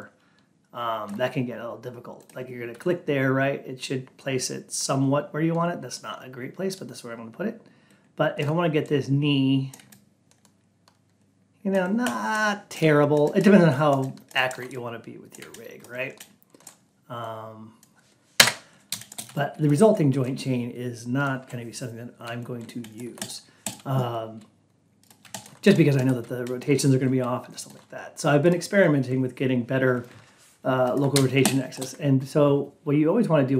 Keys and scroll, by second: 18.3 Return.